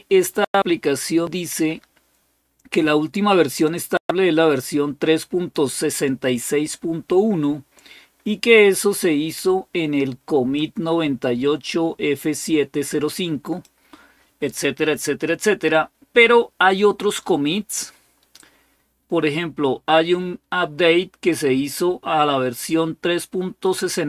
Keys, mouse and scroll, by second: 3.1-5.4 drag, 10.3-13.4 drag, 15.1 scroll down 3, 17.5-18.1 scroll down 2.